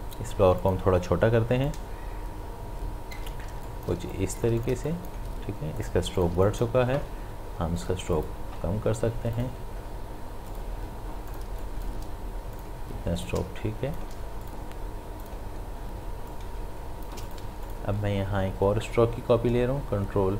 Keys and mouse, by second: 1.7-3.5 alt+drag, 3.5 shift+space, 3.6 ctrl+click, 4.0 ctrl+space, 4.2 click, 4.7 space, 4.9 click, 5.3 space, 5.8 click, 6.0 space, 6.2 ctrl+alt+click, 6.4 ctrl+click, 11.5 space, 11.6 click, 12.0 space, 12.5 click, 16.3 alt+click, 17.4 v, 17.6 click.